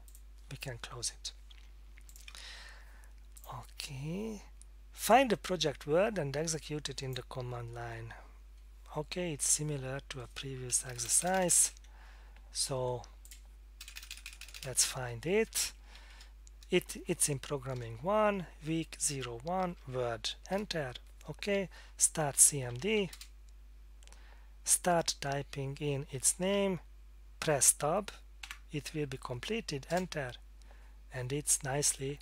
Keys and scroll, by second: 10.9-11.5 typing, 13.8-14.4 typing, 14.8 Tab, 15.5 Down, 15.7 Down, 16.0 Up, 16.1 Up, 17.7 Return, 18.4 Down, 19.1 Return, 19.6 Down, 20.5 Return, 22.4-23.5 typing, 24.9-26.4 typing, 28.4 Tab, 29.9 Return.